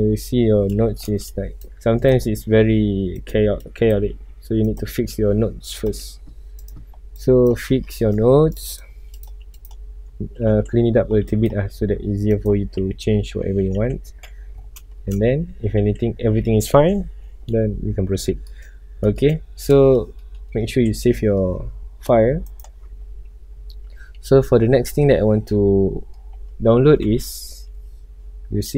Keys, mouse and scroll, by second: 9.1 click, 9.4 x, 9.5-12.8 drag, 12.8 scroll up 1, 13.4 alt+a, 14.9-15.3 shift+middle drag, 15.3 scroll up 1, 18.2 scroll down 1, 18.4 middle click, 18.7 scroll up 1, 19.1-20.9 middle drag, 20.9 ctrl+s, 21.1-22.6 middle drag, 22.6 click, 23.3 scroll down 1, 23.8-24.2 middle drag, 24.2 scroll up 1, 24.8-25.7 middle drag, 25.7 scroll up 1, 26.3-28.7 middle drag.